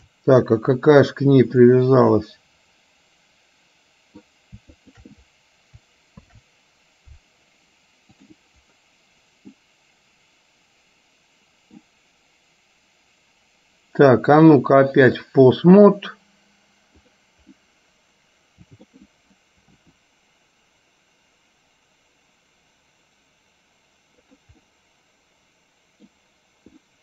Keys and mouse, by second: 1.8-4.3 middle drag, 4.9 shift+click, 6.3 ctrl+p, 9.8-11.8 middle drag, 14.4-15.4 drag, 17.1 click, 17.7-18.9 middle drag, 19.8 r, 24.7-26.2 middle drag, 26.9 middle click.